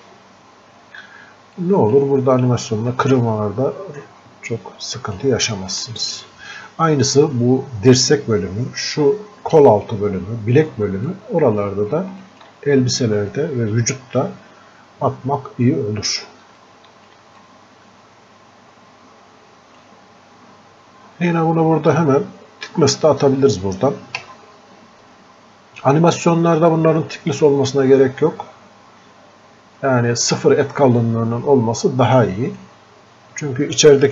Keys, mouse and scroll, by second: 0.9 scroll up 1, 1.6-3.1 drag, 3.1-5.8 drag, 11.1 click, 16.4 alt+click, 17.0 alt+click, 17.7-19.9 drag, 21.5-22.0 scroll up 1, 23.9 scroll down 1, 24.2 space, 26.9-29.8 drag, 31.0-34.1 drag.